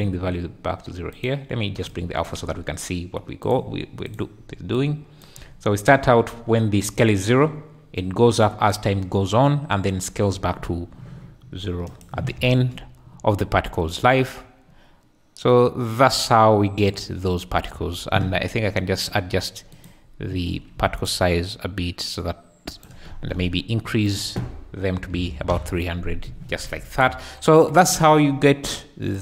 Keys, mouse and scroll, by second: 1.2 click, 3.4 click, 11.9 shift+click, 12.3 space, 17.7 space, 19.8 click, 21.2-22.8 drag, 24.1-25.6 drag, 25.2 KP_0, 26.5 alt+a, 26.8 `.